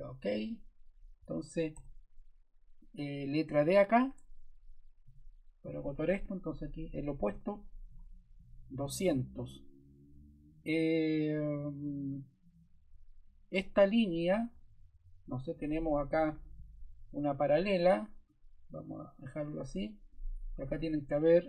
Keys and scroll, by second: 1.2 Escape, 1.7 s, 4.1 Escape, 5.0 d, 6.6-7.6 typing, 7.9 Return, 14.4 Escape, 20.6 0.